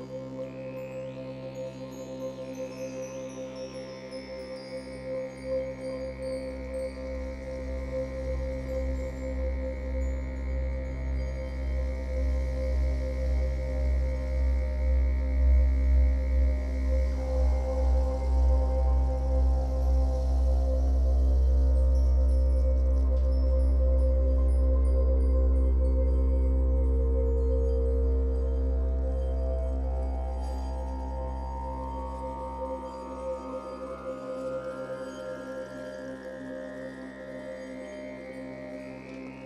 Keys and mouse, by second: 0.1 click, 0.9 typing, 1.8 click, 2.4-2.8 typing, 4.3 click, 5.7 typing, 6.9 click, 7.9 typing, 10.1 click, 11.4 ctrl+alt+click, 13.9-21.2 drag, 21.2-21.5 typing, 22.6 typing, 23.2-25.7 drag, 25.7 typing, 26.6-28.8 drag, 28.8-29.2 typing, 30.5 click, 31.1 typing, 32.5-35.1 drag, 35.8 typing, 37.1 click, 38.0 g, 38.4 z.